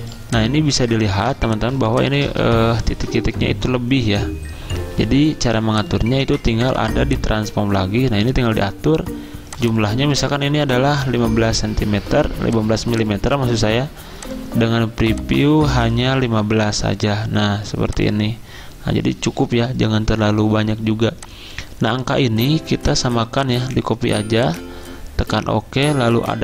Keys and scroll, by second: 0.0-1.2 typing, 3.0 v, 10.0 ctrl+a, 11.0-11.3 typing, 16.2-18.2 typing.